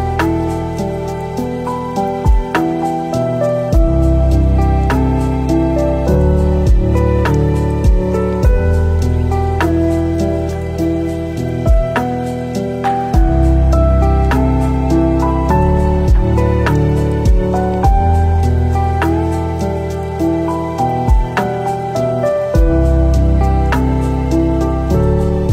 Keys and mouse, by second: 1.3-2.6 shift+drag, 3.0 click, 3.2-3.9 middle drag, 4.4 click, 5.0-5.7 shift+middle drag, 9.0 s, 10.1 alt+z, 10.7 s, 12.1 g, 13.2 s, 14.0 g, 14.9 alt+z, 15.4 click, 15.9 g, 19.2-19.5 shift+middle drag, 20.1 click, 23.1 shift+d.